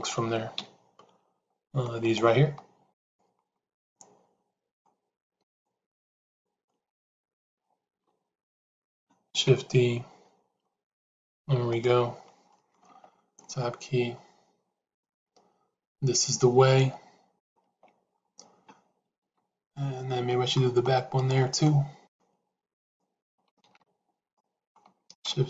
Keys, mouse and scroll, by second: 0.5 KP_Decimal, 3.7-4.7 middle drag, 6.7 middle click, 8.2 shift+z, 12.4 middle click, 12.9 Tab, 14.9-17.3 middle drag, 17.5 Tab, 19.8 shift+z, 20.2 middle click, 21.6 middle click, 23.7 shift+z, 24.3 middle click.